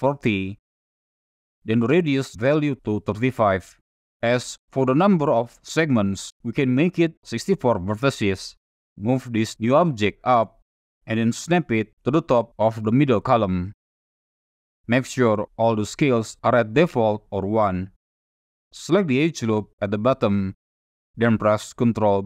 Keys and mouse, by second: 2.2-3.6 drag, 5.4-7.6 drag, 10.1-11.0 drag, 11.8-13.0 drag, 14.0-14.4 drag, 14.6 shift+drag, 15.4 click, 15.9 shift+drag, 18.4 2, 20.0 alt+click.